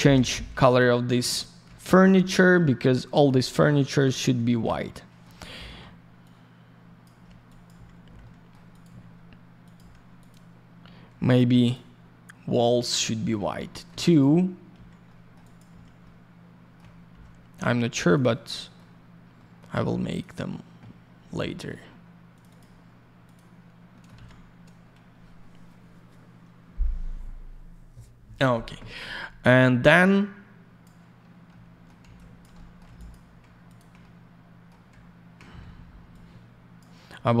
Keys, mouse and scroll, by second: 0.1 F4, 0.6 ctrl+click, 0.7 ctrl+click, 1.3 ctrl+click, 1.4 ctrl+click, 1.7 alt+middle click, 2.1 middle click, 2.8 alt+middle click, 3.4 middle click, 3.6 middle click, 5.4 middle click, 6.2 ctrl+click, 7.4 click, 7.6 click, 8.2 alt+middle click, 8.7 alt+click, 8.8 alt+й, 9.2 alt+scroll down 1, 9.6 alt+click, 9.7 alt+й, 10.2 alt+click, 10.3 alt+click, 11.6 alt+click, 11.7 alt+click, 12.5 alt+click, 12.6 alt+click, 12.9 alt+middle click, 13.7 middle click, 13.8 middle click, 14.0 alt+click, 14.2 alt+double click, 14.7 alt+й, 15.0 alt+middle click, 15.4 alt+click, 15.5 alt+click, 15.7 alt+й, 16.0 alt+middle click, 18.1 click, 18.2 click, 18.5 middle click, 19.0-19.3 scroll down 1, 19.3 middle click, 20.1 click, 20.2 click, 21.1-21.4 scroll down 1, 21.4 middle click, 21.9 scroll up 1, 22.3 click, 22.4 click, 22.4 click, 22.5 double click, 23.2 click, 23.3 click, 23.9 middle click, 24.0 shift+middle click, 24.1 alt+shift+й, 29.9 click, 31.4 alt+middle click, 32.0 alt+я, 32.1 click, 32.5 alt+middle click, 32.9 click, 33.1 click, 33.6 ctrl+click, 33.7 ctrl+click, 34.0 middle click, 36.1 click, 37.1-37.4 scroll down 1.